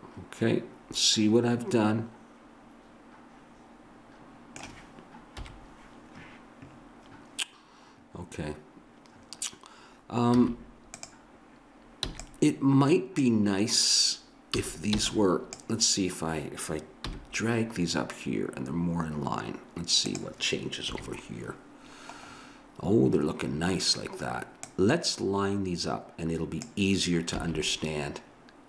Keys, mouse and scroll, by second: 5.3 KP_1, 10.4 z, 12.1 b, 14.6 a, 15.0 b, 17.1 g, 20.9 KP_3, 24.6-26.6 drag, 27.3 a.